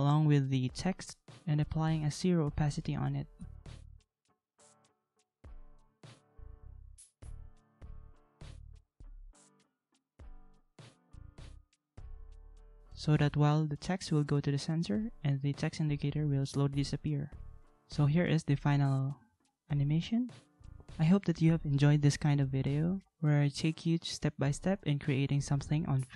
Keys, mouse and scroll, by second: 2.2 ctrl+a, 4.9 ctrl+a, 11.0 ctrl+x, 11.6 ctrl+c, 12.0 ctrl+v, 13.3 ctrl+v, 14.1 ctrl+a.